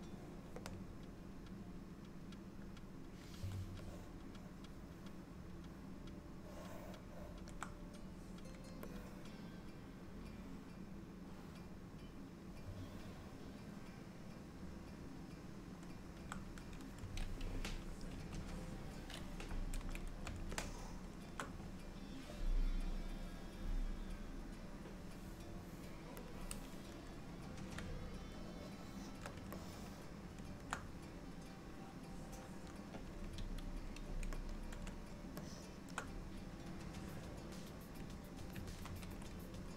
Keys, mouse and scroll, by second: 3.9 middle click, 8.9 middle click, 18.2 KP_3, 20.6 shift+middle click, 26.3 click, 28.5 shift+middle click, 29.6 ctrl+middle click, 33.4 f, 35.5 shift+middle click, 37.4 click, 39.0 ctrl+z.